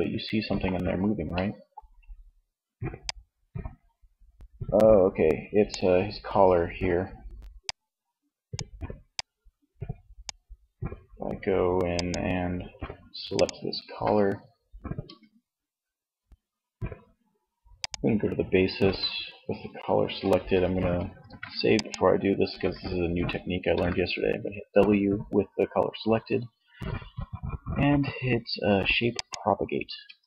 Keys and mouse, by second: 9.8 Tab, 14.1 Tab, 17.9 Tab, 20.3 ctrl+s, 22.8 w, 29.1 Tab.